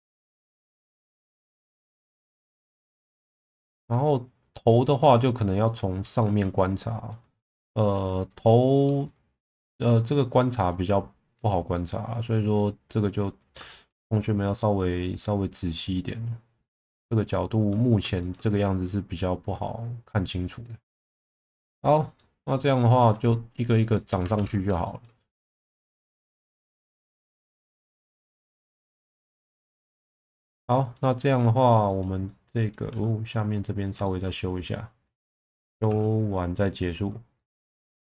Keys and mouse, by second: 0.4 Tab, 1.0 middle click, 2.0 Tab, 2.3-3.7 middle drag, 6.2 shift+middle click, 7.4 shift+middle click, 8.3 click, 8.7 1, 9.0 click, 9.6 click, 11.4 click, 13.7 shift+middle click, 14.5 click, 18.2 shift+middle click, 21.0 middle click, 22.2 middle click, 22.8 middle click, 23.9 middle click, 24.4 ctrl+s, 24.8 shift+middle click, 25.3 alt+middle click, 26.4 shift+middle drag, 28.4 click, 29.0 click, 29.6 middle click, 29.9 Tab, 30.4 middle click, 31.3 middle click, 31.9 shift+middle click, 32.3 middle click, 32.9 Tab, 34.0 shift+middle click, 35.9 shift+v, 37.3 click, 37.8 shift+v.